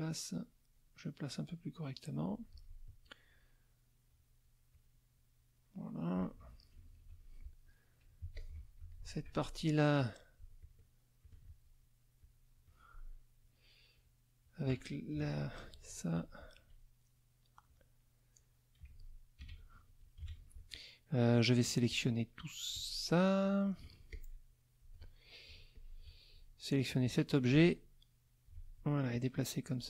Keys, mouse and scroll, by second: 6.8 ctrl+KP_5, 7.7 middle click, 8.2 z, 8.3 click, 8.8 F2, 8.9 middle click, 10.0 click, 10.6 shift+click, 11.2 shift+click, 12.2 shift+click, 15.1 ctrl+shift+KP_5, 16.1 shift+click, 19.4 ctrl+KP_5, 20.1 ctrl+KP_5, 21.9-23.8 drag, 24.1 shift+click, 25.7 shift+click, 27.0-28.6 drag, 29.1 alt+click.